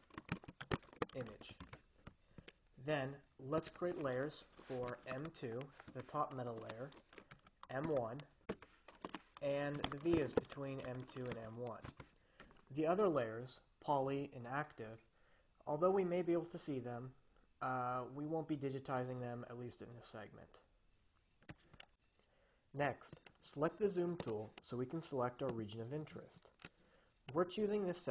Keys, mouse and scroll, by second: 0.0-1.9 typing, 3.9 click, 4.4 m, 4.7 2, 5.0 Return, 6.9 click, 7.6 m, 8.1 1, 8.2 Return, 9.4 click, 9.7-12.0 typing, 24.5 click, 25.8-27.4 drag.